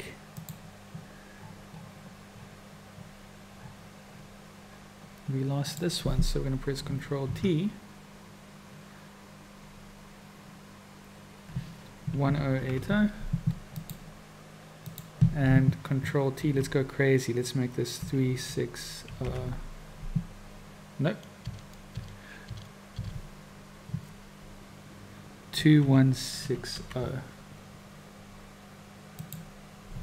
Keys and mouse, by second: 5.6 click, 7.3 ctrl+t, 14.8 click, 16.4 ctrl+t.